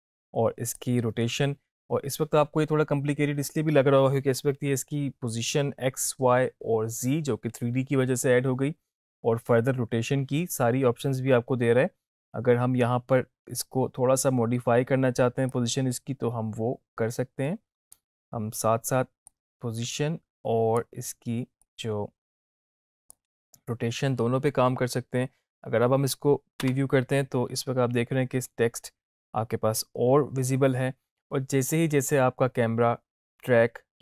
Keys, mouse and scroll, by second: 15.6-18.1 drag, 26.7 space.